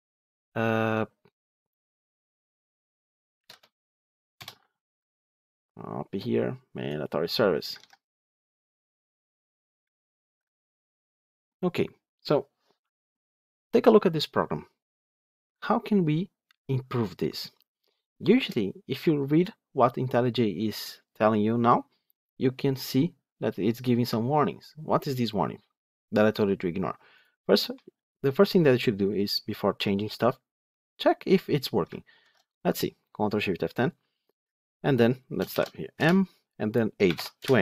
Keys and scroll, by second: 7.7 ctrl+c, 32.1 ctrl+shift+F10.